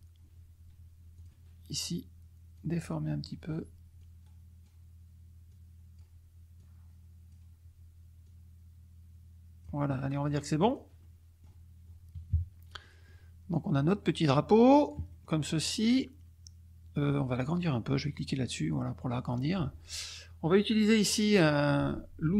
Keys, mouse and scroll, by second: 1.1 click, 2.5 click, 3.9 click, 4.2-4.8 scroll down 2, 5.4 click, 6.6 click, 8.2-9.8 drag, 10.6 click, 11.0 click, 12.4 KP_Subtract, 12.8 click, 13.5-15.3 drag, 15.6 middle click, 18.2-19.5 drag.